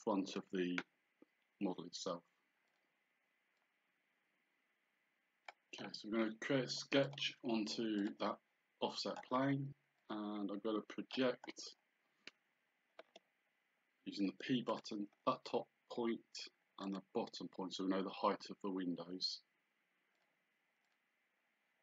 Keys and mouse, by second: 2.7 click, 7.1 click, 10.0 click, 14.7 click, 16.9 click, 20.2 click.